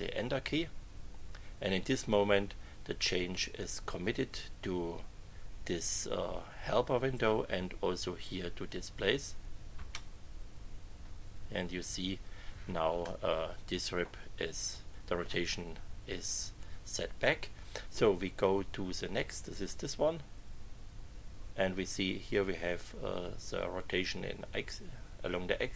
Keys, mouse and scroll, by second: 9.7 Return, 13.0-15.4 middle drag, 19.9 Left.